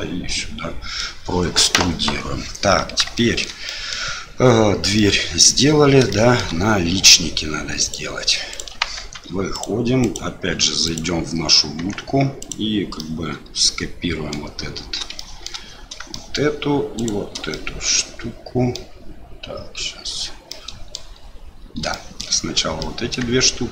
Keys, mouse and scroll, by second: 3.2 shift+middle click, 3.8 middle click, 5.1 middle click, 6.2 shift+middle click, 7.8 click, 8.5 click, 8.9 Tab, 9.5 click, 10.0 click, 10.8 click, 11.8 Tab, 12.4 click, 13.0-14.3 middle drag, 15.1 shift+middle click, 16.1 shift+middle click, 17.0 shift+click, 17.5-18.7 middle drag, 20.5 middle click, 21.9 shift+middle click, 22.8 middle click.